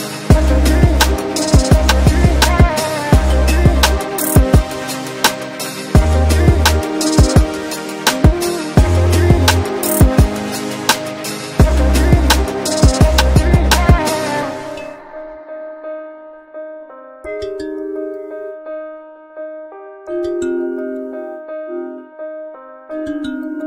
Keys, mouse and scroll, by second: 3.0 c, 3.5-5.0 drag, 5.0 F12, 8.4 click, 11.1-11.7 scroll down 1, 11.7-12.6 scroll up 1, 12.8 shift+click, 13.1 c, 13.6-14.3 scroll down 1, 14.3-15.0 scroll up 1, 15.0 click, 16.9 right click, 17.4 ctrl+space, 17.5 ctrl+click, 18.5-20.9 typing, 21.6-22.0 scroll down 1, 22.0 scroll up 1, 23.2-23.6 shift+drag.